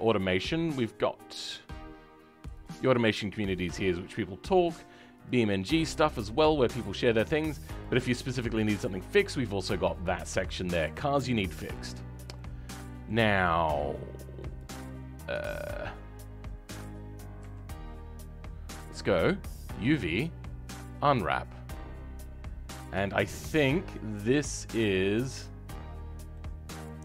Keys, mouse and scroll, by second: 14.5 click, 26.0 scroll down 2, 26.3 middle click.